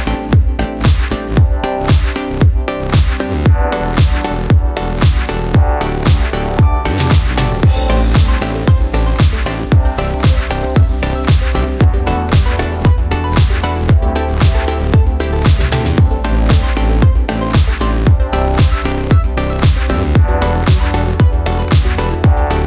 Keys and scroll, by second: 1.7 Tab.